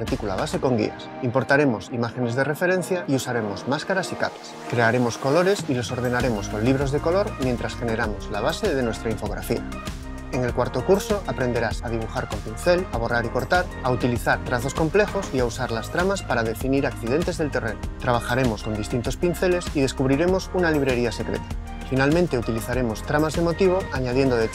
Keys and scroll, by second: 3.7 super+7, 9.4 super+z, 23.0-24.5 typing.